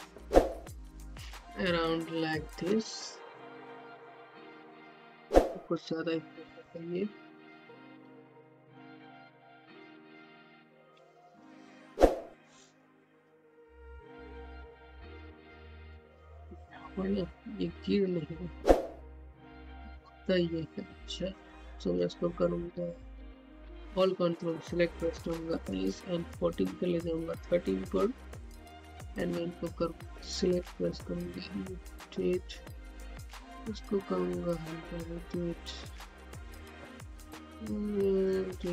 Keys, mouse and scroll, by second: 3.3 ,, 4.0 ., 4.9-7.3 drag, 7.3 ,, 8.0 ., 9.6-9.9 typing, 11.1 typing, 13.2-13.9 typing, 15.5-18.5 typing, 19.7 click, 25.0 typing, 26.1 click, 26.4-28.6 middle drag, 28.6-38.4 drag.